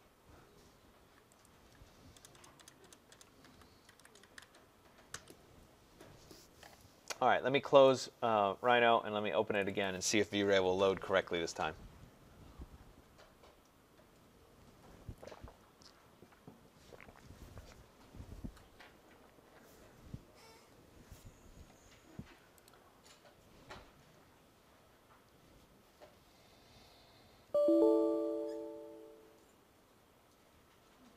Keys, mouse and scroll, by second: 1.3 click, 2.0-5.0 typing, 7.6-8.4 typing, 7.9 click, 9.4 click, 9.7 click, 14.7 click, 22.5-27.7 drag.